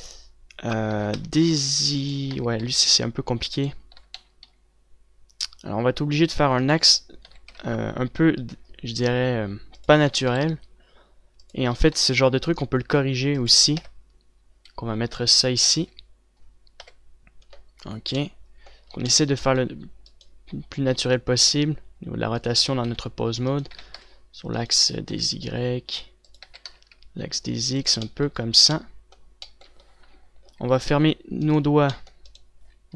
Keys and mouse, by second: 1.4 r, 2.8 r, 4.4 r, 7.8 r, 10.6 r, 12.4 r, 12.9-14.3 drag, 14.3 KP_0, 16.3 a, 17.3 KP_7, 20.7 click, 21.4 r, 23.2 r, 24.3 r, 25.4 r, 26.8 r, 28.4 click, 31.0 z, 32.9 z.